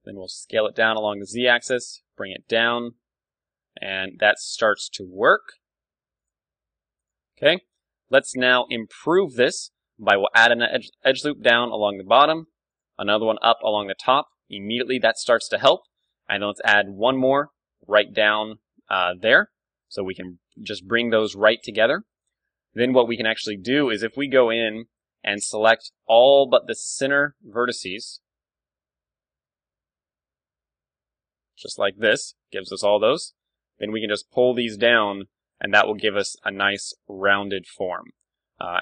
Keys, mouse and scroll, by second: 1.4 g, 2.8 Tab, 3.9 Tab, 4.0 KP_1, 4.2-6.2 middle drag, 5.4 g, 6.2-8.8 drag, 6.3 s, 7.2 Tab, 8.5 KP_1, 8.8-11.0 middle drag, 9.3 Tab, 10.0 ctrl+r, 12.0-15.2 drag, 12.4 ctrl+r, 13.5 Tab, 14.5 KP_1, 15.0 Tab, 15.1-17.7 middle drag, 16.3 ctrl+r, 19.1-21.0 drag, 19.3 Tab, 20.8 KP_1, 21.0-25.3 middle drag, 21.5 Tab, 22.3 ctrl+Tab, 23.7 a, 24.1 z, 25.0 b, 26.4 b, 27.3 b, 28.5 b, 30.1 KP_3, 30.9 b, 32.0 z, 32.1-34.3 middle drag, 32.8 KP_1, 33.4 g, 35.6-38.8 drag, 35.7 Tab, 36.8 Tab, 37.1 g, 37.8 a.